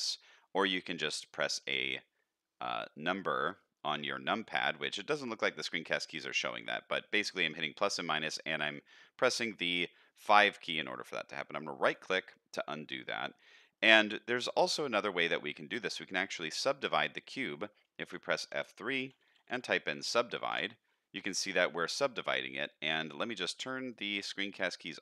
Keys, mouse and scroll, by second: 12.9 middle click, 14.1-16.3 middle drag, 17.0 middle click, 18.0 F3, 23.9 click.